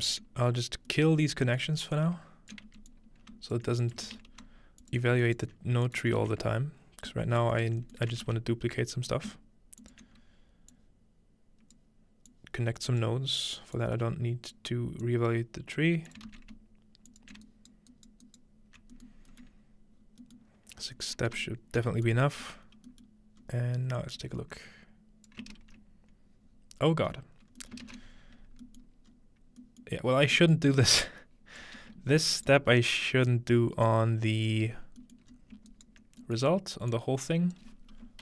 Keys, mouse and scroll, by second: 1.2-3.3 scroll up 1, 2.0-4.8 ctrl+drag, 4.1 shift+d, 5.0-6.6 ctrl+alt+shift+drag, 5.3-6.6 alt+right drag, 6.2 typing, 7.6-9.0 ctrl+drag, 8.3 shift+d, 9.8 ctrl+click, 10.7-14.6 drag, 15.0-19.0 drag, 16.3 shift+d, 17.5-17.9 alt+right drag, 19.2-20.9 scroll down 2, 20.9 scroll up 2, 21.9-22.2 scroll up 1, 22.1-26.6 alt+shift+drag, 22.7-23.4 scroll down 1, 23.4-25.3 scroll up 1, 25.6 ctrl+space, 26.6 scroll down 2, 27.2 scroll up 2, 27.9-28.7 ctrl+middle drag, 28.1-28.6 scroll down 2, 29.1 scroll up 1, 30.2 scroll down 1, 31.0-34.9 drag, 32.3-34.0 right drag, 34.9-35.3 scroll down 2, 35.2-36.9 middle drag, 35.3 scroll up 2, 35.7 ctrl+right click, 36.9 click.